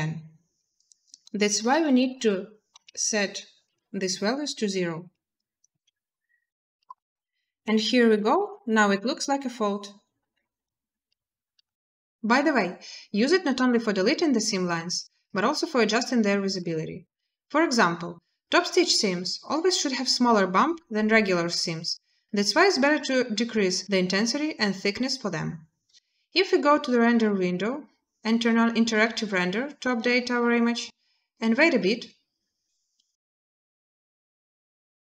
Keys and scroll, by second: 1.4 0, 2.5 0, 3.4 Return, 5.5 a.